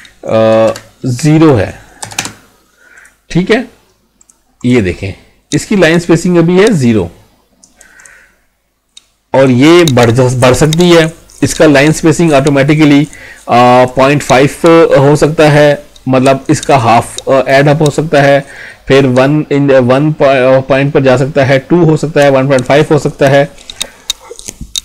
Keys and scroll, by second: 0.7 ctrl+a.